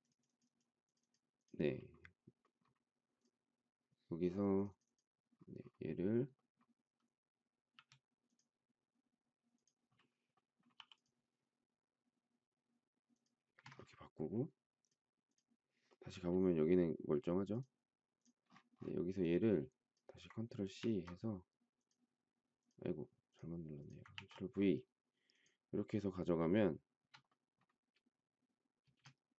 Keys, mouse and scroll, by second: 7.7 c, 10.7 p, 13.4 space, 13.5 Escape, 20.8 ctrl+c, 24.1 ctrl+v, 26.7 shift+middle click, 28.8 space.